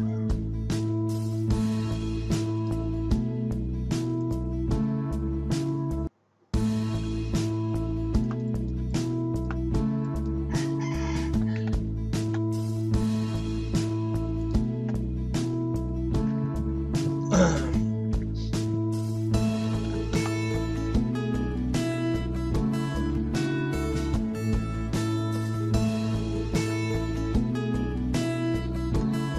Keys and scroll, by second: 0.0-0.4 typing, 11.1-12.3 typing, 13.4-14.2 typing, 14.7 alt+Tab, 19.4-20.7 typing, 22.0 alt+Tab, 26.5 alt+Tab.